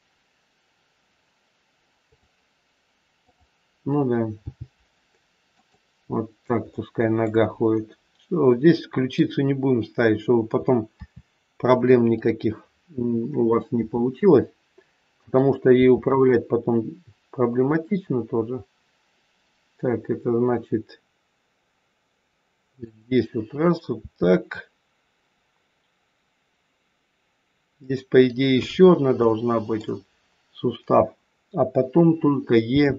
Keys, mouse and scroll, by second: 3.1 click, 4.3 g, 6.7 middle click, 8.7 middle click, 10.8 KP_3, 12.1 click, 13.7 e, 15.7 e, 23.9 e, 28.8 scroll up 3, 29.2 shift+middle click, 32.7 e.